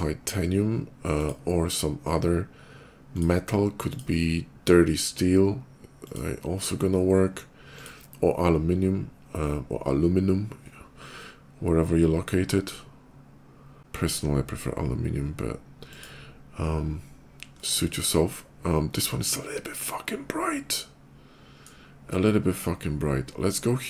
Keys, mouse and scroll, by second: 1.0 alt+click, 2.9 click, 3.7 click, 5.8 click, 7.5 click, 15.6 click, 17.4-21.4 middle drag, 23.2 click.